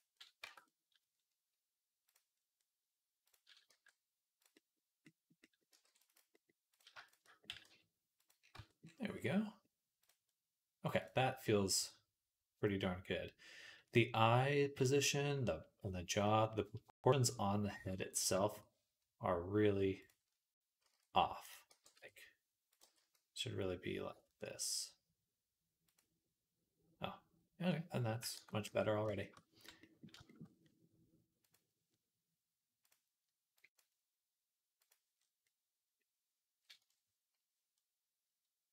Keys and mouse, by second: 0.3 Tab, 0.5-2.0 drag, 3.5 g, 5.5 ctrl+click, 5.7 ctrl+r, 6.0 middle click, 7.3 middle click, 7.3 g, 8.4 Tab, 8.7-10.8 middle drag, 10.8 click, 10.9 middle click, 12.1-14.8 middle drag, 14.8 shift+click, 15.0-16.1 middle drag, 16.1 click, 16.2-18.2 middle drag, 18.2-22.7 shift+drag, 20.7 s, 21.5 g, 22.7 g, 28.2 ctrl+a, 29.1 shift+middle click, 31.3-33.6 drag, 34.7-38.7 drag.